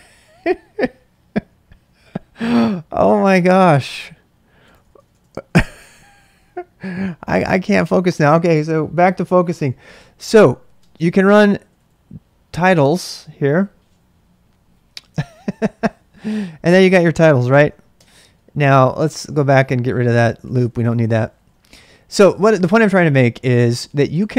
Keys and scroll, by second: 1.6-2.7 typing, 4.7-6.0 typing, 10.4-13.0 typing, 15.1 Return, 18.0 ctrl+c, 18.3-19.4 typing, 19.5 Return, 20.4-21.4 typing, 23.5-24.3 typing.